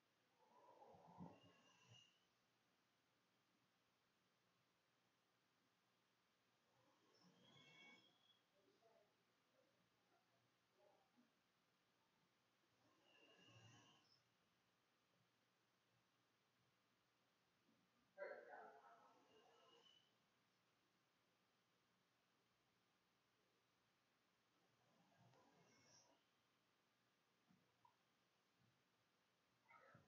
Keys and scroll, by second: 3.4-12.4 typing, 14.3-22.2 typing, 24.7 ctrl+shift+a, 25.3 ctrl+shift+s, 26.1 w.